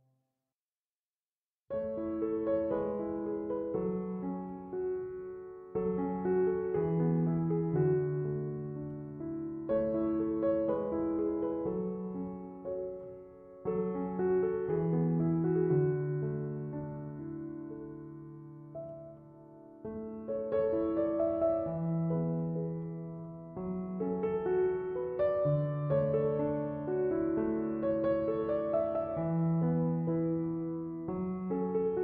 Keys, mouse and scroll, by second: 2.8 6, 3.1 0, 3.3 Return, 9.5 1, 10.0 5, 10.3 Return.